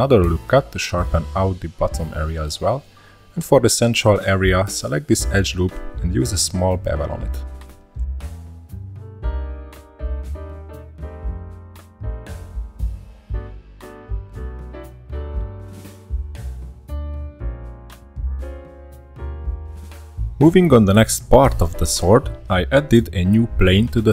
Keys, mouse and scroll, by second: 3.9 shift+middle click, 4.3 2, 4.7 alt+click, 5.3-5.6 scroll down 4, 5.6 middle click, 5.7 c, 8.8-9.1 scroll up 3, 9.1-9.8 middle drag, 9.8 shift+click, 10.9 scroll down 1, 11.1 c, 14.3 ctrl+b, 17.3-17.7 shift+middle drag, 17.7 scroll down 2, 18.0-20.4 middle drag, 20.4 shift+a, 23.6 middle click.